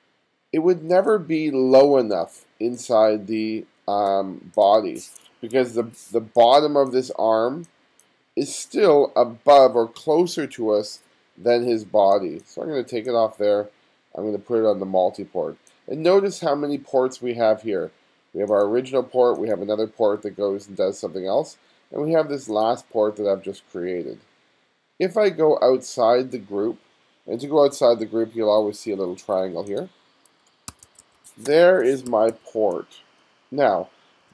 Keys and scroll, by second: 5.6 2, 6.2 2, 12.1 space, 12.6 space, 30.8 1, 31.5 space, 32.8 1, 34.2 2.